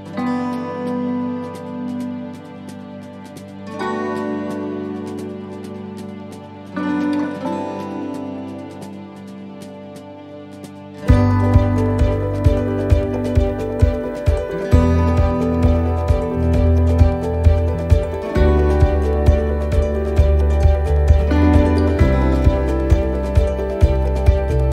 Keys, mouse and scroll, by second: 0.6 click, 2.5 shift+right click, 3.5 right click, 3.9 right click, 5.2 click, 8.7 right click, 10.5 click, 11.7 shift+middle click, 12.5 right click, 13.4 x, 15.3 click, 20.3 click, 22.5 click, 24.1 middle click.